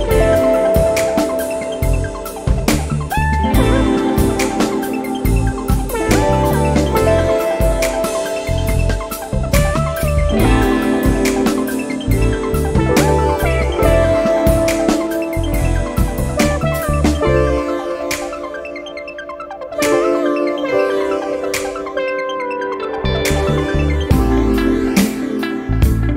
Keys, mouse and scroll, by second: 1.3 0, 2.0-2.5 scroll down 1, 3.0 scroll up 1, 4.1 click, 5.6 click, 8.9 click, 10.8 click, 12.6 click, 14.6 click, 17.9 Return, 19.6 click, 21.1 click, 21.9 click, 24.4 click, 25.4 click.